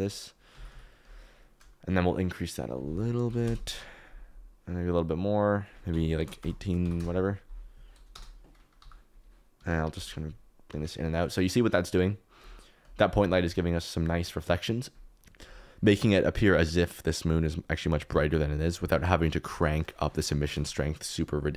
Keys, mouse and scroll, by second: 0.5 g, 0.6 y, 4.9-6.9 drag, 8.1 KP_0, 8.7 g, 9.5 Escape, 9.9 g, 10.6 Escape, 13.5 shift+right click, 17.3-18.3 drag, 19.7 click.